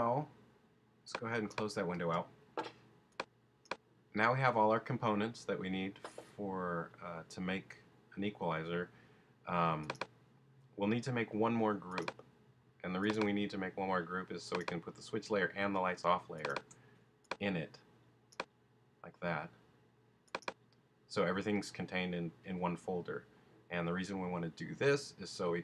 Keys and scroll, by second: 1.9 space.